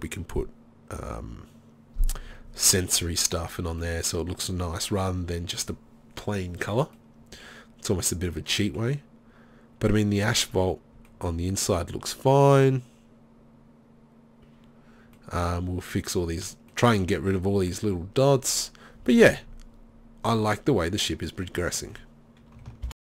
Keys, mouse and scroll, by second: 7.1 middle click, 7.2 click, 9.3 middle click, 15.7 middle drag, 16.1-16.9 middle drag, 19.6 middle click.